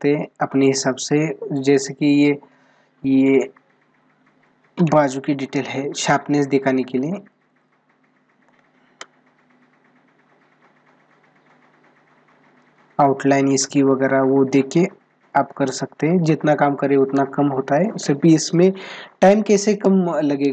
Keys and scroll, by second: 8.2 space.